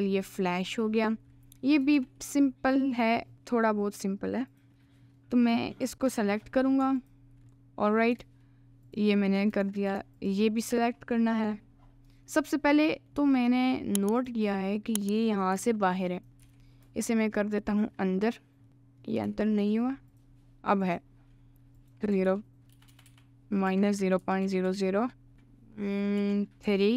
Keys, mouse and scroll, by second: 0.9 alt+middle click, 1.9 shift+a, 4.5 click, 5.0 middle click, 5.5 middle click, 6.1 Tab, 6.5 middle click, 7.0 alt+click, 8.9 alt+shift+click, 9.6 ctrl+z, 10.2 alt+shift+click, 11.0-12.2 middle drag, 13.0 middle click, 13.2 Tab, 14.1 click, 15.5 g, 16.4 g, 18.7 middle click, 19.2 g, 20.9 click, 21.9-26.9 drag, 22.9 BackSpace, 24.6 0.